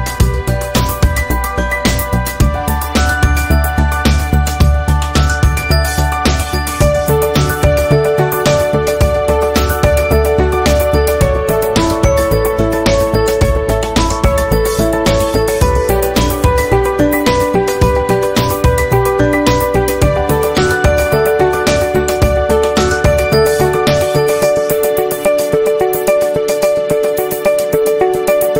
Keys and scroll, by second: 5.4 v, 7.7 a, 12.9 ctrl+z, 24.9 i, 26.0 v, 27.3 i.